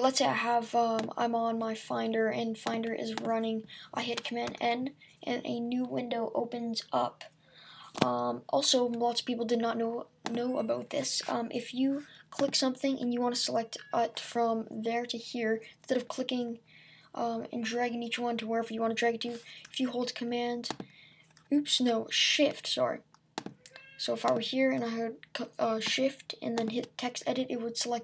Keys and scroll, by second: 4.5 super+n.